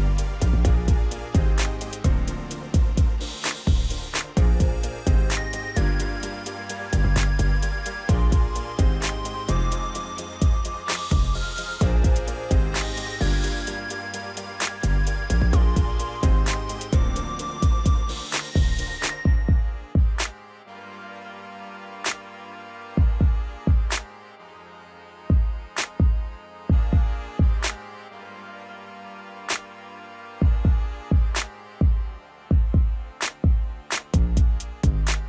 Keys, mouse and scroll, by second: 1.1-4.2 drag, 13.0-16.1 right drag, 16.3-16.7 scroll up 2, 17.3-19.9 drag, 19.9-20.3 scroll down 3, 20.3-21.9 middle drag, 21.9 KP_1, 23.2 Tab, 23.8 scroll up 2, 24.1-25.4 scroll down 1, 25.4 Tab, 26.5 a, 26.9 3, 27.9-30.3 drag, 31.0-31.5 scroll down 1, 31.5 Tab, 33.1 click, 34.1-34.6 drag, 34.6-35.0 middle drag, 35.0 scroll up 1.